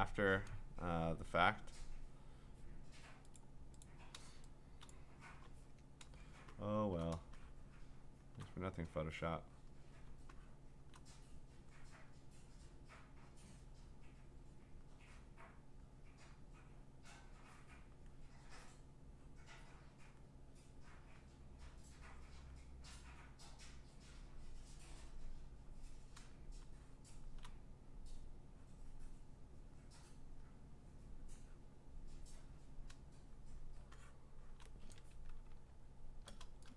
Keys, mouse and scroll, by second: 3.4-4.8 click, 4.9 click, 5.4-6.7 b, 6.7 click, 7.0 click, 7.2 click, 7.7 click, 8.2 click, 8.3 click, 8.4 click, 9.7 click, 10.1 click, 10.6 click, 10.7 click, 10.8 click, 11.0 click, 12.1 click, 13.5 click, 14.8 click, 15.8 click, 17.1 click, 17.9 click, 20.0 click, 22.4 click, 26.1-27.4 click, 26.8 click, 27.2 click, 28.9 click, 30.4 click, 33.6 click, 34.4 click, 35.4-36.4 scroll.